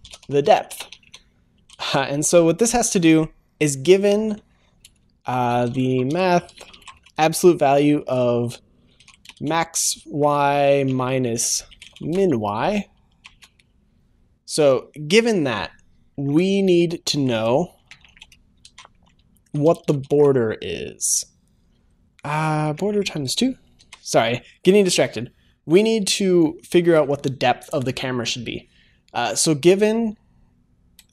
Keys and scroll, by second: 18.7 ctrl+s, 22.6 ctrl+s, 22.8 Return, 23.7 ctrl+s.